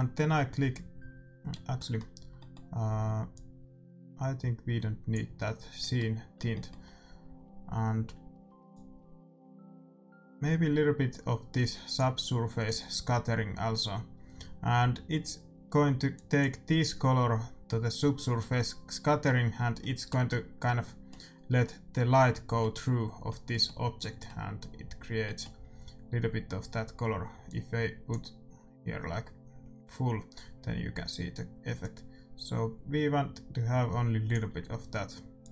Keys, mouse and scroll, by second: 1.4-4.8 middle drag, 3.2-5.0 drag, 5.8-8.6 middle drag, 8.6-10.4 drag, 16.1-17.8 drag, 19.7-26.9 middle drag, 27.4-29.3 drag, 31.7-33.5 drag, 35.4-35.5 drag.